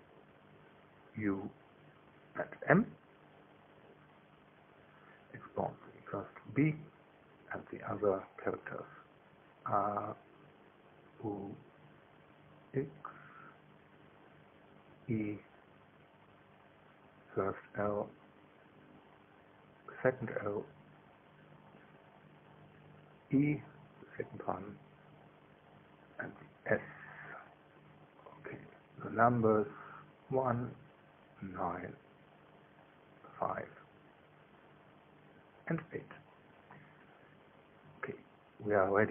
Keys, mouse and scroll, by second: 0.5 click, 1.5 right click, 3.1 click, 3.9 right click, 5.1 click, 6.0 right click, 7.6 click, 8.7 right click, 9.7 click, 10.6 middle click, 11.3 right click, 12.4 click, 13.7 right click, 14.6 click, 15.8 right click, 16.8 click, 18.5 right click, 19.9 click, 21.3 click, 22.6 click, 23.6 right click, 25.1 click, 27.3 right click, 28.4 click, 29.5 right click, 30.6 click, 31.8 right click, 32.9 click, 34.0 right click, 35.0 click, 36.1 right click, 37.3 click.